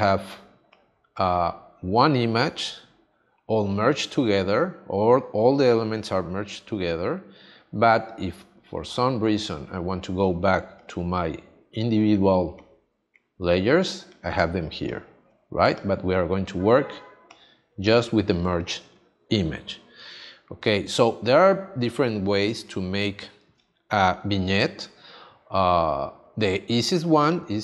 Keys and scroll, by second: 18.4 space, 22.4 space.